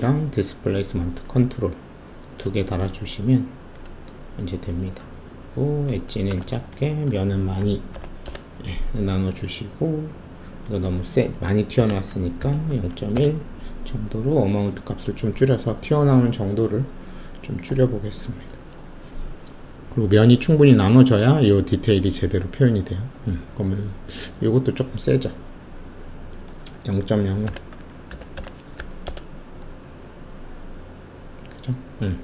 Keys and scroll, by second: 6.2 1, 7.6-7.9 typing, 8.2 Return, 11.7-12.7 typing, 13.1 Return, 16.5 shift+F1, 27.4-28.7 typing, 29.0 Return.